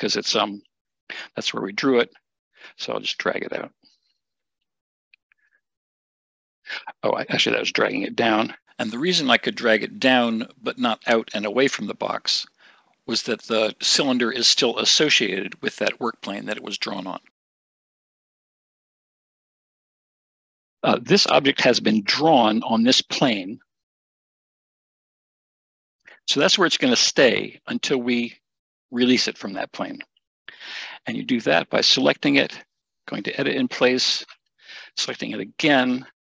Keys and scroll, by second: 8.1 ctrl+shift+z, 21.6 Escape.